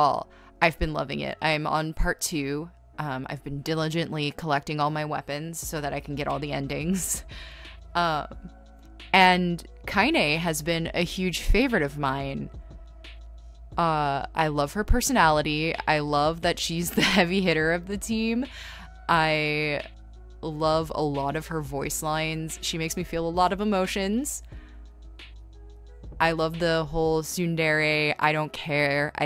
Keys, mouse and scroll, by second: 0.7 ctrl+z, 1.7 ctrl+z, 2.7 ctrl+z, 5.9 ctrl+z, 7.0 e, 7.5 scroll, 11.5 scroll, 12.9 scroll, 13.0 space, 13.7 ctrl+z, 14.2-14.6 scroll, 15.4 space, 15.7 scroll, 16.6 ctrl+z, 17.1 b, 17.3 scroll, 19.8-22.0 typing, 21.1 ctrl+z, 22.7 ctrl+z, 23.2-24.9 typing, 25.5 ctrl+z, 26.0 ctrl+z, 27.1-27.6 scroll, 27.4 ctrl+z, 28.8 scroll.